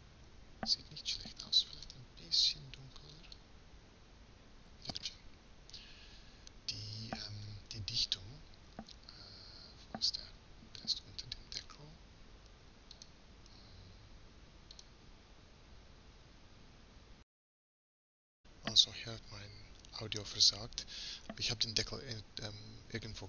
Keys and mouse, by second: 7.6-9.5 middle drag, 12.1-17.3 drag, 18.1-22.9 middle drag, 22.9-23.2 drag.